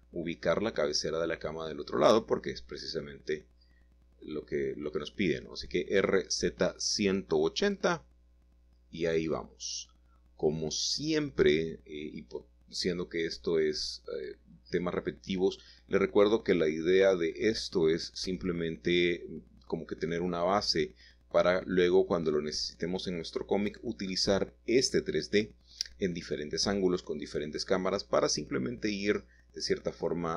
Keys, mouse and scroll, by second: 0.0-1.1 drag, 1.1-3.1 typing, 4.1-5.4 shift+middle drag, 4.9-5.5 scroll up 1, 5.5 typing, 6.4 shift+middle click, 7.0 typing, 8.7 y, 10.6 Escape, 12.9 g, 13.1 y, 14.0 Escape, 14.5 h, 15.0 Escape, 15.4 Escape, 15.6 typing, 17.3 alt+h, 18.5-19.1 typing, 22.9-24.0 drag, 25.5-26.0 typing, 27.8-28.9 drag, 29.1 middle click, 30.3 middle click.